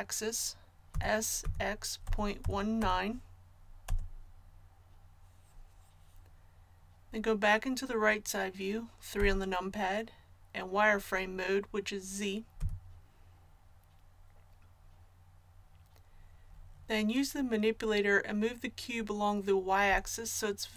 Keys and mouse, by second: 0.9 s, 9.1 KP_3, 12.6 z.